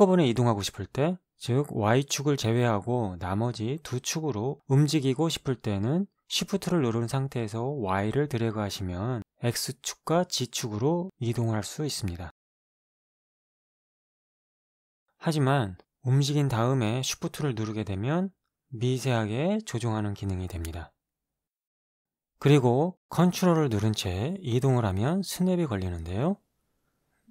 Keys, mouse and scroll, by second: 7.8-10.9 shift+drag, 12.9-15.0 shift+drag, 15.8-21.4 drag, 23.6-26.5 ctrl+drag.